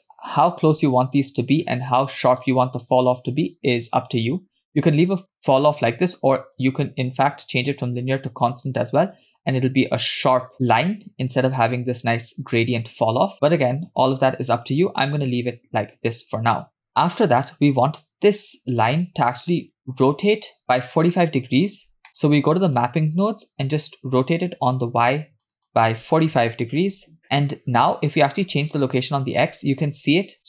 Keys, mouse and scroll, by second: 0.2 click, 1.5 click, 2.8-4.2 scroll up 2, 6.6-9.1 drag, 11.4-13.3 scroll up 4, 13.3-13.9 scroll down 5, 16.4-17.4 scroll down 2, 17.4-17.8 scroll down 4, 22.1 middle click, 22.7 click, 24.3-27.0 drag, 28.5-30.4 drag.